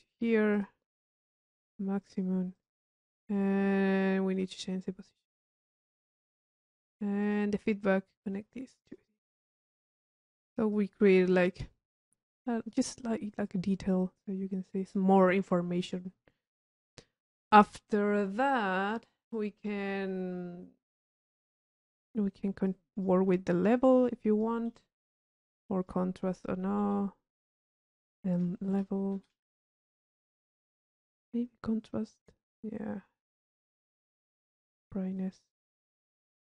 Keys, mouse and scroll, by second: 2.2 click, 2.7 click, 4.6 click, 5.4-6.8 drag, 7.4 click, 8.3 click, 10.0 click, 12.4 click, 13.6-15.1 drag, 15.7 click, 16.8-18.5 right drag, 17.4 click, 22.8 click, 24.8-26.7 right drag, 25.6 click, 27.0 click, 27.7 right click, 28.5 click, 30.2 click, 30.9 click, 32.0 click, 34.6 click.